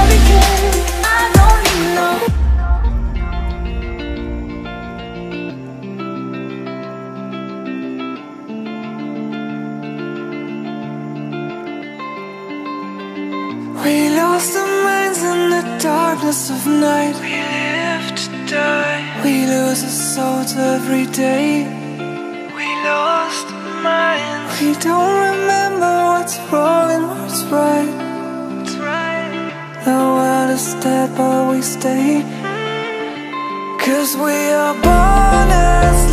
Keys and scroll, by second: 15.7 space, 34.8 ctrl+-.